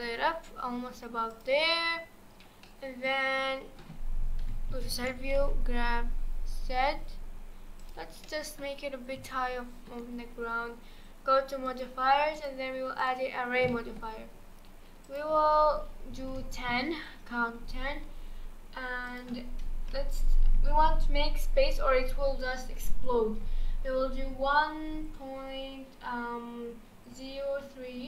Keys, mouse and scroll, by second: 2.1-2.6 scroll down 4, 2.6-4.4 middle drag, 4.4 KP_1, 4.7 g, 8.2-9.2 middle drag, 9.2 scroll down 1, 9.2-10.1 shift+middle drag, 10.1-10.8 scroll up 2, 11.7 click, 12.3-13.4 drag, 13.4 scroll down 2, 13.7-15.0 shift+middle drag, 15.0-18.1 drag, 19.1-22.2 drag.